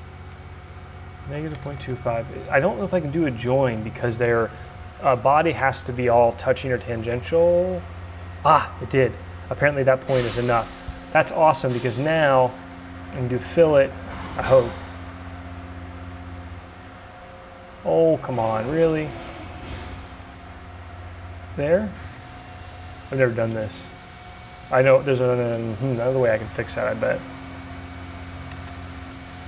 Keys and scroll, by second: 1.3-2.2 typing, 27.9 2, 28.5 Tab.